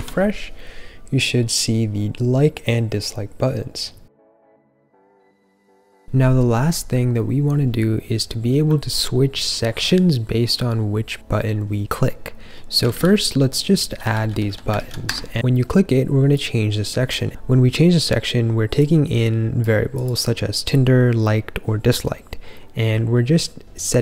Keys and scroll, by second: 12.7-14.4 typing, 14.7 super+/, 15.0 Escape.